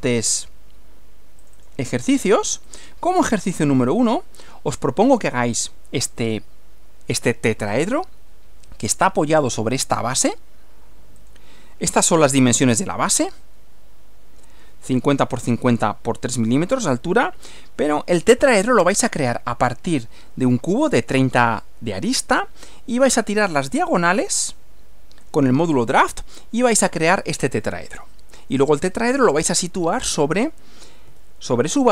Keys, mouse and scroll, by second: 1.4 click, 2.7 click, 4.1-5.4 drag, 11.2 click, 11.9 Right, 17.3 Right, 18.7 click, 31.1 Left.